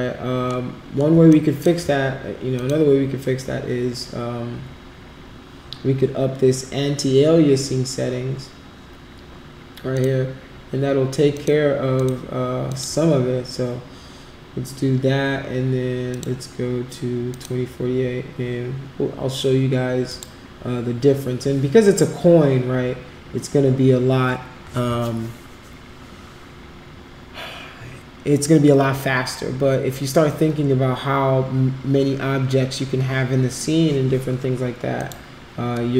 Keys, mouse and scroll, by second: 1.3 alt+click, 2.5 click, 9.9 click, 11.3 click, 11.9 click, 12.7 click, 16.1 click, 17.3 click, 20.1 click, 35.0 click.